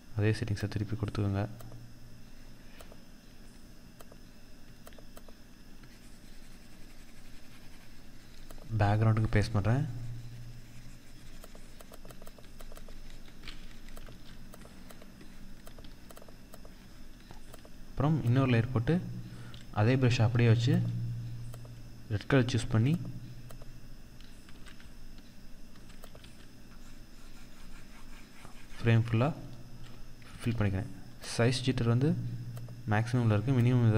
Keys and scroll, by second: 13.5 ctrl+=, 15.2 ctrl+-, 16.5 ctrl+-, 23.9 ctrl+=, 24.7 ctrl+=, 25.5 ctrl+-, 29.9 ctrl+z.